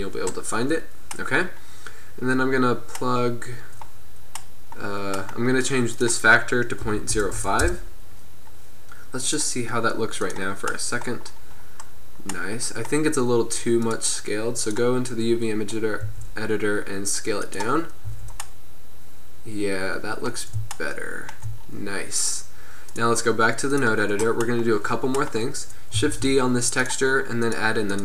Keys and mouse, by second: 6.0-7.6 middle drag, 7.6-9.1 drag, 9.3-10.8 drag, 10.8-12.5 middle drag, 13.9-15.8 middle drag, 16.2 s, 18.2 Tab, 23.0-24.1 drag, 24.6 middle click, 26.2 shift+d.